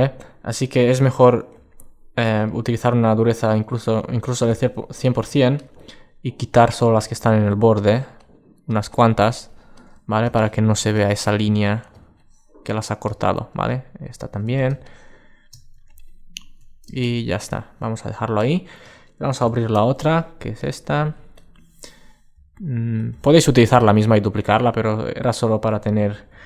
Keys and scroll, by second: 19.2 super+o.